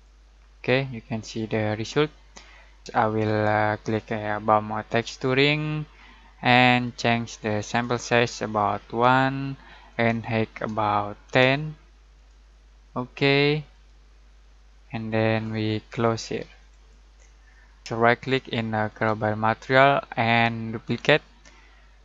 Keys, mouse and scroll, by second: 4.8 click, 8.8 1, 9.8 click, 10.5-11.7 typing, 12.1-15.5 drag, 18.8 right click, 20.8 click.